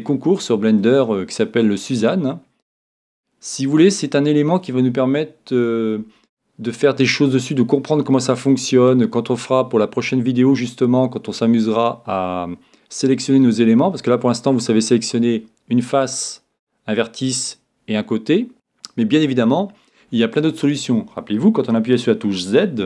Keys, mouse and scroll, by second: 4.0-5.9 middle drag.